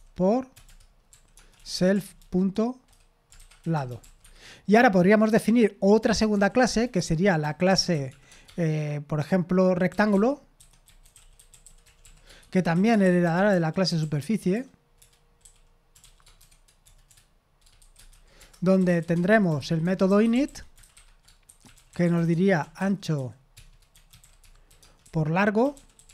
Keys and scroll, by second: 13.6-14.4 typing, 15.4-26.1 typing.